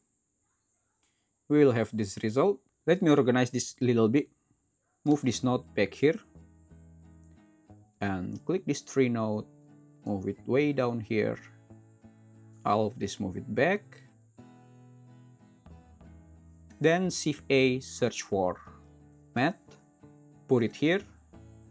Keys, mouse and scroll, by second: 17.3 shift+a.